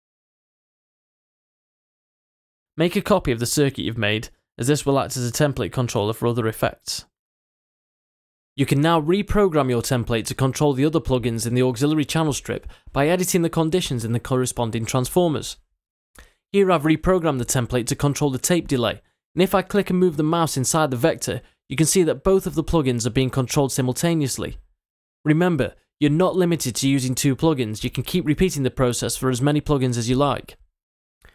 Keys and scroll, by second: 5.8 super+c, 8.1 super+v.